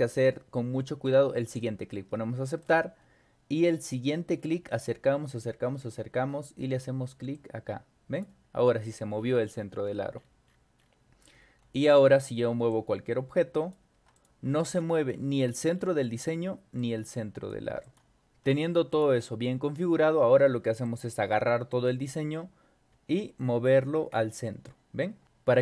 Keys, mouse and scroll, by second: 1.6 click, 3.8 scroll up 2, 4.3-6.8 scroll up 14, 7.3 click, 8.8-11.0 scroll down 14, 11.4 scroll down 2, 11.9 click, 12.7-13.7 drag, 14.2 click, 14.6 ctrl+y, 15.1 scroll up 2, 15.8 scroll down 2, 16.8-17.5 drag, 17.8 click, 18.9 click, 19.5-20.1 scroll up 4, 20.8-21.9 drag, 22.9 Up, 25.1 Down.